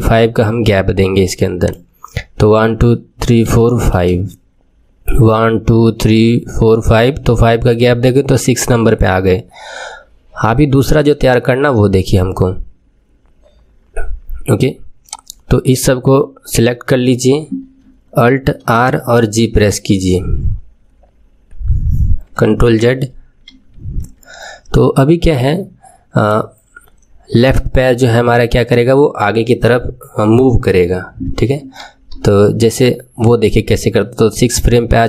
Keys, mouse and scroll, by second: 1.6 click, 3.0-3.4 scroll up 4, 3.5-9.5 drag, 3.5 shift+middle click, 4.0-4.6 scroll up 6, 15.0 click, 16.6 click, 18.6 alt+r, 19.1 alt+g, 22.9 ctrl+z, 23.5 ctrl+z, 25.4-28.4 middle drag, 31.8 KP_3.